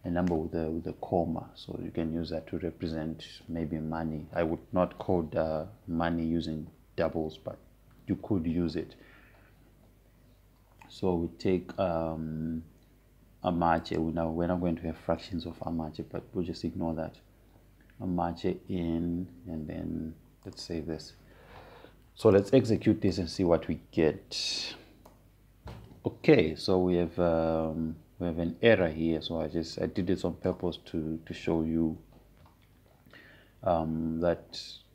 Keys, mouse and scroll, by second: 15.5 click, 22.2 click, 26.1 Up, 28.6 Return, 31.5-34.6 drag.